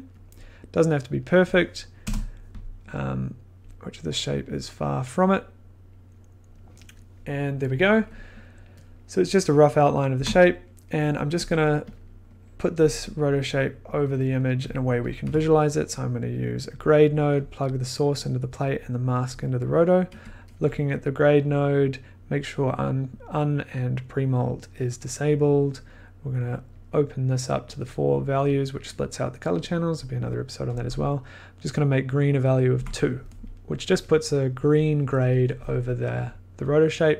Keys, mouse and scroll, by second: 0.2 click, 1.2 click, 2.0 Return, 2.2 scroll, 4.4 click, 5.9 click, 8.4 scroll, 11.5 click, 12.0 click, 12.4 middle click, 14.7 click, 15.1 click, 15.2 g, 16.3 click, 16.9 click, 17.5 click, 19.3 click, 19.8 click, 20.1 1, 26.7 click, 26.8 click, 31.6 click, 32.7 Up, 34.7-36.4 shift+drag.